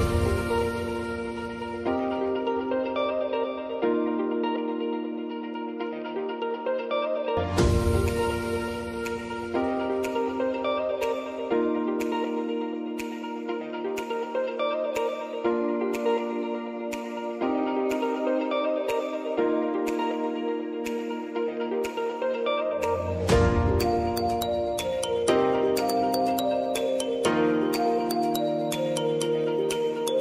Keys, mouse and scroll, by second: 0.3-2.5 drag, 2.5-3.3 alt+scroll up 1, 3.5-4.9 drag, 4.9 Up, 5.4 -, 5.8 click, 6.7 Left, 7.3 click, 8.1 Left, 8.4 click, 9.3 Up, 9.7 click, 12.5 click, 15.5 ctrl+d, 16.3 click, 18.2 j, 19.4 ctrl+k, 20.4 shift+e, 21.6 click, 23.3 ctrl+t, 23.7 click, 24.0 ctrl+a, 24.6 shift+e, 26.1-30.2 drag.